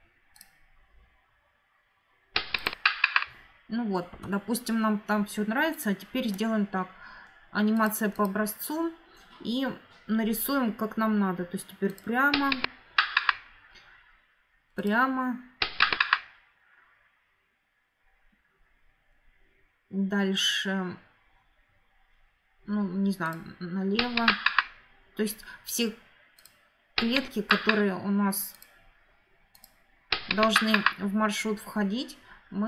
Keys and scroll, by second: 3.9 Escape.